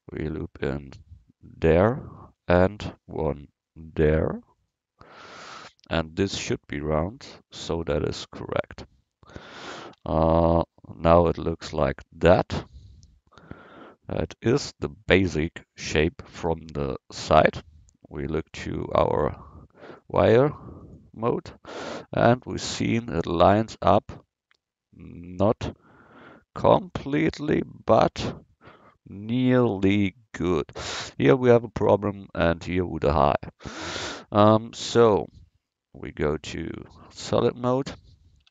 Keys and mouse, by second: 2.3 ctrl+r, 10.0 Tab, 16.7 KP_1, 21.4-25.6 middle drag, 33.7 Tab, 36.4-38.5 drag.